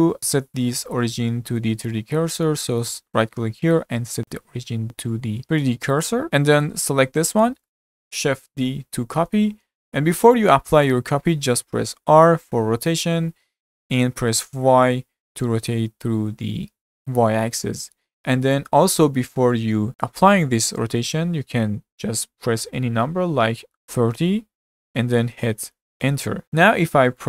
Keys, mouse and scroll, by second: 2.8-5.4 right drag, 6.3-7.3 middle drag, 7.3-7.7 scroll up 1, 7.7 shift+middle click, 8.5 shift+d.